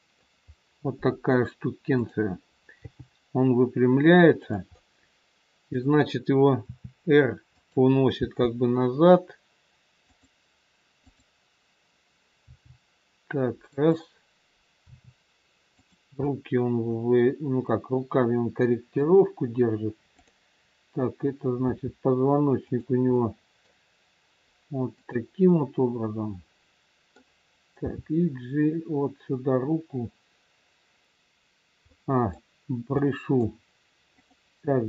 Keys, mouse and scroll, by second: 0.4-1.1 scroll up 1, 1.9 click, 2.8 g, 4.7 middle click, 6.7 r, 8.2 g, 10.9 click, 12.4 g, 14.8 r, 16.1 middle click, 20.2 click, 21.6 r, 23.2 middle click, 24.9 click, 25.8 middle click, 27.8 g, 31.8 middle click, 34.0 middle click, 34.0 click.